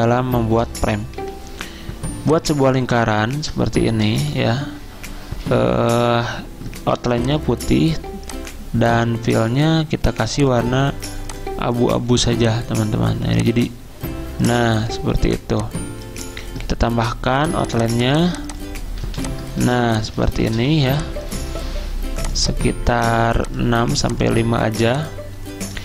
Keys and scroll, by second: 0.9-1.7 typing, 4.2 v, 19.1 z, 20.6 v.